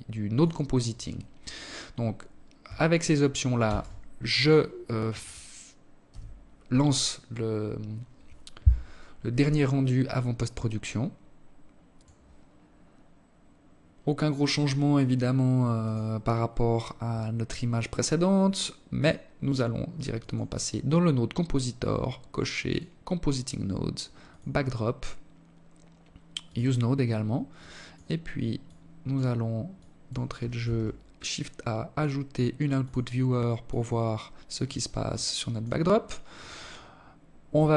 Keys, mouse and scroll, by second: 1.7 ctrl+s.